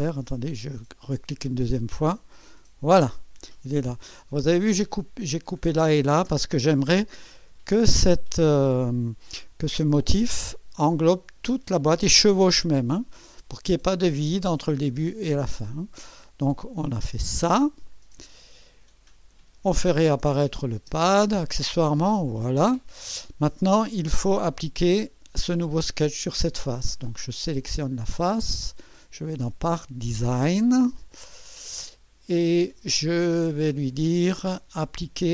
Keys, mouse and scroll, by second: 1.1 click, 17.1 click, 20.4 click, 20.8 space, 21.8-22.8 drag, 24.0 click, 27.6 click, 28.6 click, 29.3 click, 31.4 click.